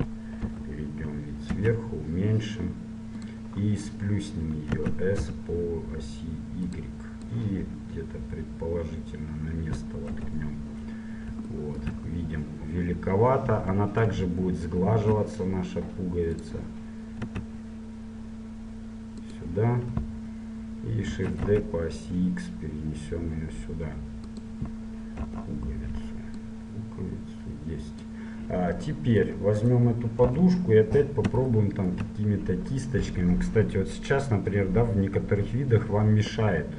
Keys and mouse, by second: 0.5 KP_7, 1.8 s, 5.0 s, 7.4-9.4 drag, 10.2 KP_1, 11.2 click, 14.2 ctrl+1, 14.9 ctrl+2, 16.5-18.4 drag, 17.5 s, 21.2 shift+d, 25.3 KP_7, 26.5-28.4 drag, 29.0 click, 30.4 KP_1, 31.0 right click, 31.7 middle click, 31.9-33.6 drag, 34.2-36.7 middle drag.